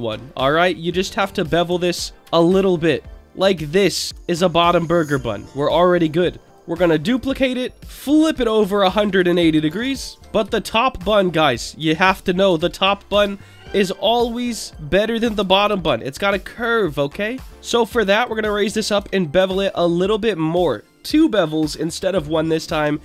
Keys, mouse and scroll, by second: 0.0 shift+middle click, 0.8 click, 2.2 ctrl+b, 4.0 click, 4.1 Tab, 4.4-5.6 middle drag, 5.9 click, 6.5 shift+d, 6.5 click, 7.5 alt+middle click, 7.7 alt+middle click, 8.2 r, 9.1 KP_1, 9.5 KP_8, 9.6 KP_0, 9.8 Return, 10.1 Tab, 10.1 click, 10.1 scroll up 4, 10.5 shift+middle click, 12.6 Delete, 13.8 middle click, 14.7 click, 16.7 Delete, 17.5 middle click, 17.5 f, 17.7 click, 19.0 ctrl+b, 19.6 scroll up 1, 22.2 click, 22.8 Tab.